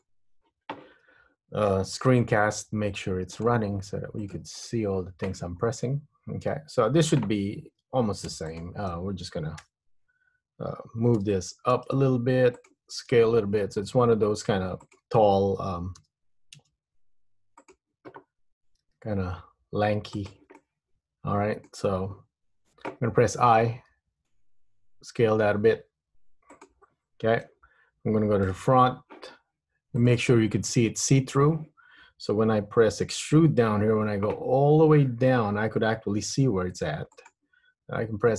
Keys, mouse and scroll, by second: 5.8-6.7 scroll up 3, 6.7 Tab, 8.4 3, 8.7 click, 9.8 KP_1, 11.3 g, 13.2 s, 16.2 g, 19.0 s, 20.7 middle click, 23.8 i, 28.6 KP_1, 30.1 click, 33.4 e.